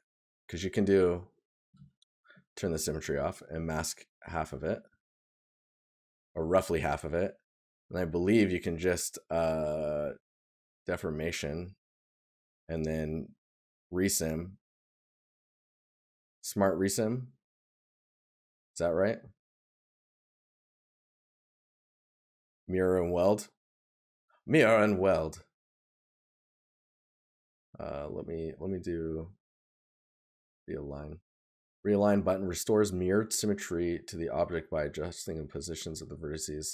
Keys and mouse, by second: 5.2 right click.